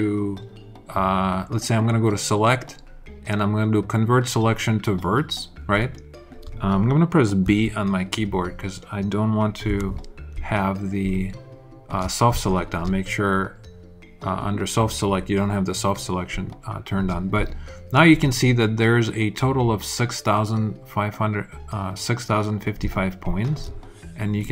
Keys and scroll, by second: 7.4 alt+b, 9.6 b, 10.3 alt+b.